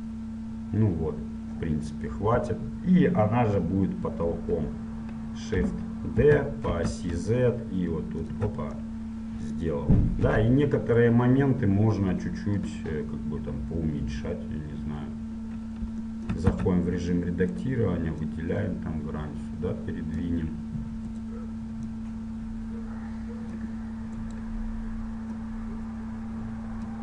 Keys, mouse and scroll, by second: 0.2-4.7 middle drag, 4.7 KP_1, 6.4 shift+d, 9.0-10.4 middle drag, 10.4 KP_7, 16.6 Tab, 17.7-19.0 right drag, 18.4 click, 19.0 middle click, 19.7 click, 21.3 right click, 22.2-23.2 middle drag, 23.2-24.4 drag, 24.4-27.0 right drag, 25.6-27.0 drag.